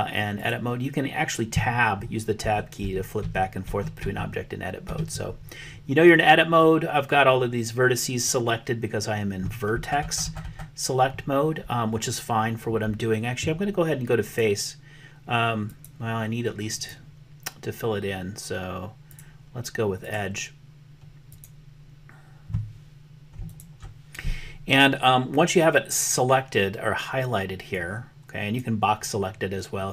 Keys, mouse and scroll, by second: 2.4 Tab, 2.9 Tab, 3.3 Tab, 3.7 Tab, 4.1 Tab, 5.0 Tab, 14.3 click, 15.7 click, 16.8 click, 19.1 click, 20.1-21.4 drag, 23.5 alt+click, 27.8 click.